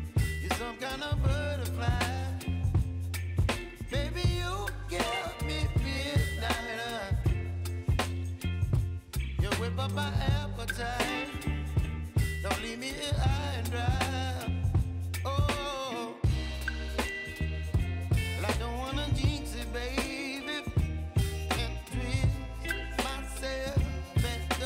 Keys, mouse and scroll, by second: 0.7 right click, 2.6 click, 3.8 right click, 4.9 click, 10.0 click, 10.3 ctrl+0, 11.1 alt+scroll down 1, 13.0-14.7 drag, 14.7 ctrl+0, 15.7-19.1 drag.